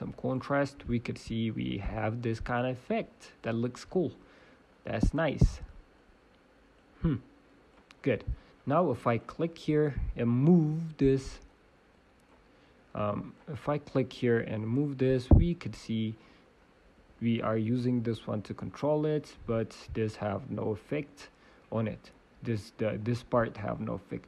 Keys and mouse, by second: 0.7-3.6 drag, 3.6 middle click, 5.9-7.9 drag, 7.9-10.3 middle drag, 10.3-11.7 drag, 10.5 g, 13.0-14.8 drag, 14.5 g, 15.1 middle click, 15.3 middle click, 15.5 middle click, 16.9 f, 17.9 g, 20.1 g, 22.5-24.2 drag.